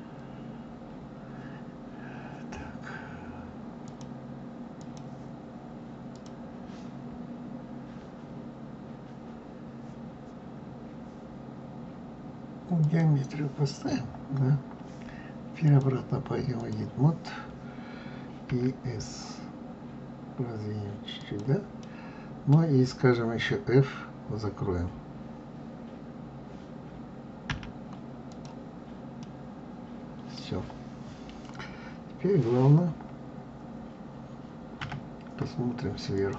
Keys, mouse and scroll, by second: 3.8-9.1 drag, 15.6-18.4 drag, 18.4 s, 21.8-24.8 middle drag, 27.4 f, 28.2 click, 29.2-32.2 middle drag, 34.7 KP_7.